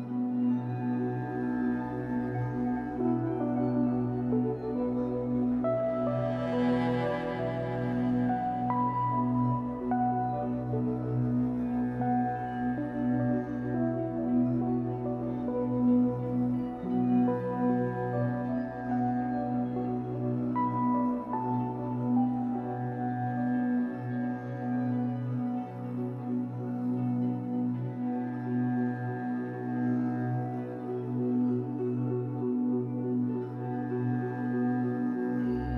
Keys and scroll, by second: 2.3 l, 8.1 ctrl+z, 9.7 ctrl+z, 15.9 shift+x, 18.3 r, 23.5 Escape, 27.3 F8.